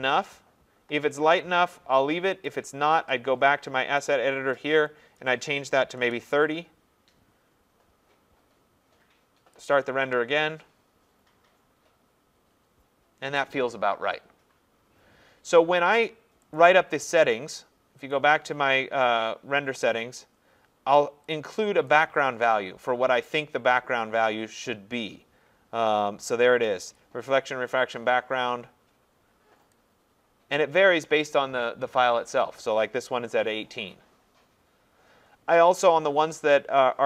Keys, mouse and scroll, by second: 2.5 click, 4.0 click, 5.2 click, 5.7-6.5 typing, 9.7 click, 16.6 click, 18.1 click, 19.3 scroll up 2, 20.1 scroll, 21.9 click, 22.8-23.5 scroll, 24.1-24.4 scroll, 27.0 click, 28.0-28.4 scroll, 30.6 click, 33.3 scroll, 34.4 scroll, 35.3-35.6 scroll.